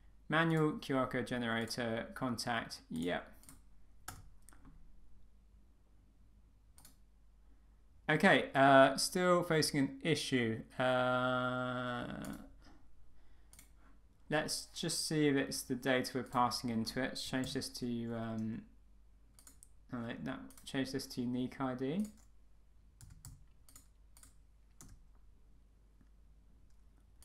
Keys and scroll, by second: 4.1 Return.